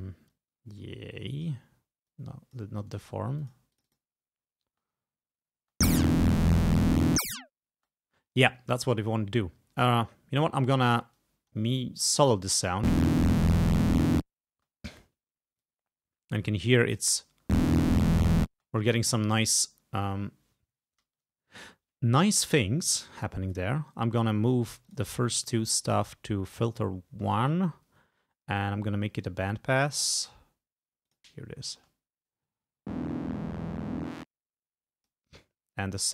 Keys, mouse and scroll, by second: 0.4-1.7 drag, 2.1 click, 3.0 right click, 3.4 click, 3.8 click, 4.7 space, 5.6 space, 7.8 space, 11.2 click, 12.3 click, 12.7 space, 14.6 space, 15.7-17.4 drag, 17.4 space, 18.6 space, 23.3 click, 24.9 click, 31.1 click, 31.8 space, 32.7 space, 34.1-35.4 drag.